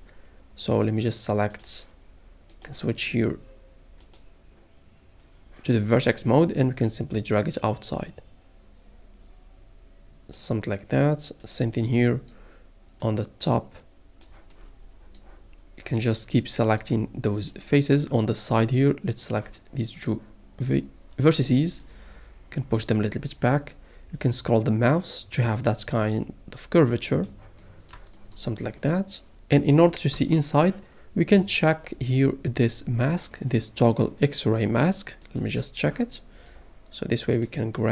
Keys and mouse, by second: 0.7 click, 2.6 click, 7.0 click, 11.4 click, 17.4 click, 21.8 click, 27.9 shift+middle click, 35.5 click, 37.4 click.